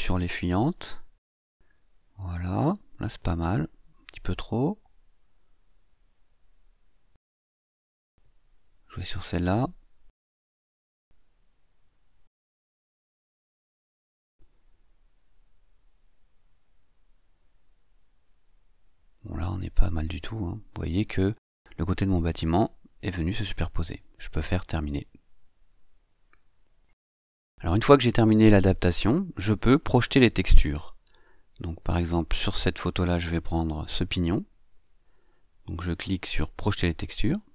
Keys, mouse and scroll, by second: 0.4-7.1 drag, 9.9-15.3 drag, 16.5-19.6 drag, 26.5 click, 34.3 click.